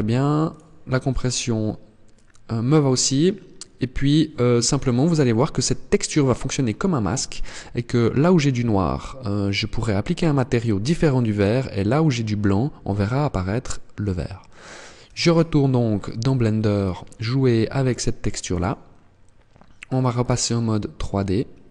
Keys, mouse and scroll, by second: 19.6 click, 20.4-21.3 scroll down 4, 21.3-21.7 scroll up 1.